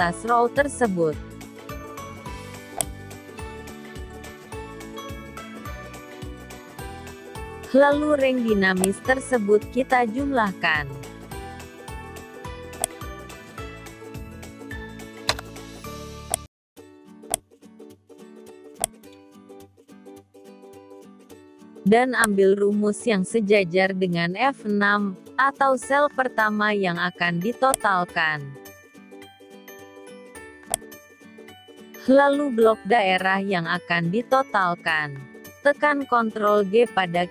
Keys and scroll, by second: 27.8 ctrl+c, 35.1 ctrl+g.